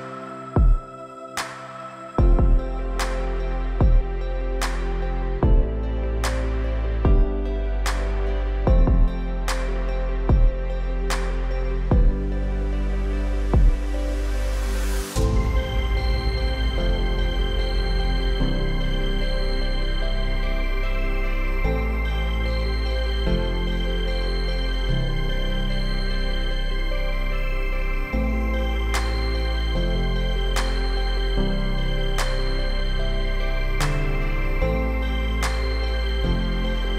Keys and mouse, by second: 5.8-6.9 drag, 7.1-7.6 shift+drag, 9.0 ctrl+r, 14.8 ctrl+r, 20.1-25.6 drag, 25.6 Tab, 30.4 shift+click, 33.7 middle click, 36.4 click, 36.7 middle click.